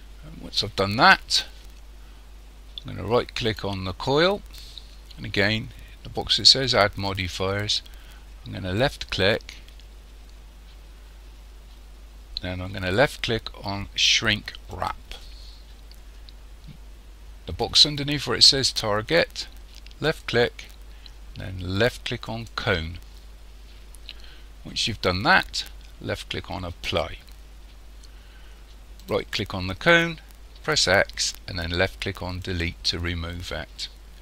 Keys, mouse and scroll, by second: 3.5 right click, 8.8 click, 20.0 click, 26.9 click, 29.0 right click, 30.7 x.